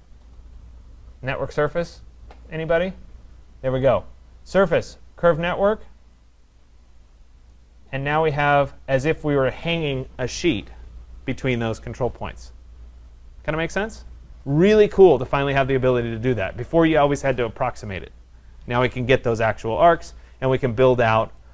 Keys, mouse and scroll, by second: 3.8 click, 5.3 click, 6.5 click, 7.1 click, 9.6 right click, 13.1 right click, 20.9 middle click, 20.9 middle click.